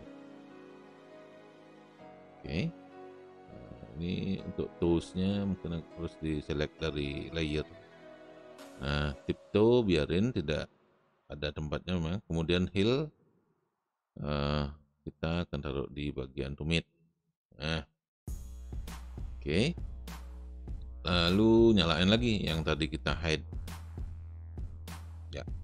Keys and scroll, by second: 0.3 space, 18.6 space.